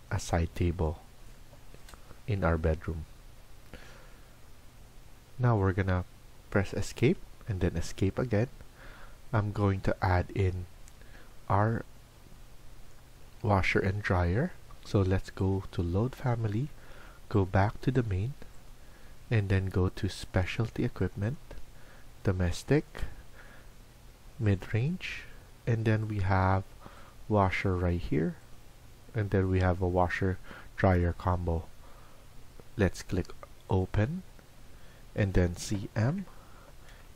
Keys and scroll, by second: 35.6-36.0 typing.